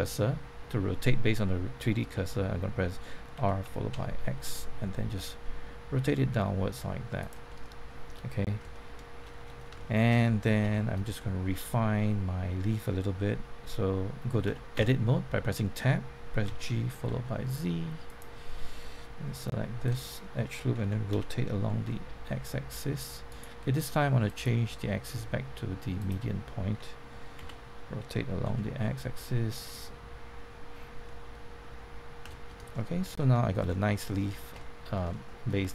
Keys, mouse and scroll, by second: 3.3-3.9 typing, 7.2 click, 7.4 middle click, 8.7 shift+middle click, 9.3-9.6 scroll up 1, 10.6 Tab, 11.1 shift+middle click, 14.4 Tab, 16.4-17.1 typing, 18.0 click, 19.8 alt+click, 21.7 typing, 23.2 right click, 24.2 click, 27.3 r, 28.4 x, 29.6 click, 31.0 middle click, 32.2 Tab, 32.7 shift+middle click, 33.6-34.0 scroll down 1, 34.1 shift+middle click, 34.6 middle click, 35.6 shift+middle click.